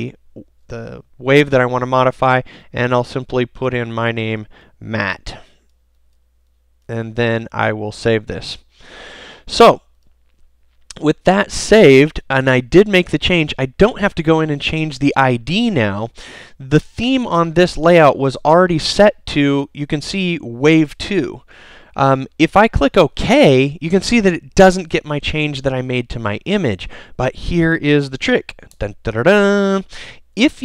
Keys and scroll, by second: 12.8 super+s.